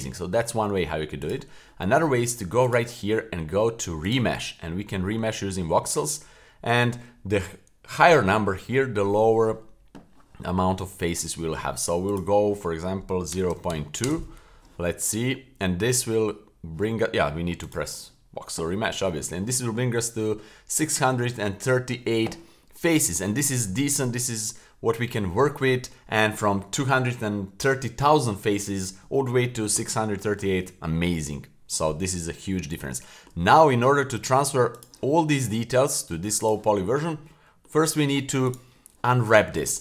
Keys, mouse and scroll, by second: 1.2 click, 2.6 click, 4.0 click, 4.6-7.0 scroll down 7, 12.1-14.1 drag, 17.6-18.1 drag, 22.6-23.5 middle drag, 24.0-26.1 middle drag, 32.9 shift+middle click, 34.7 click, 36.4 click, 37.3 middle click, 38.5-39.4 right drag.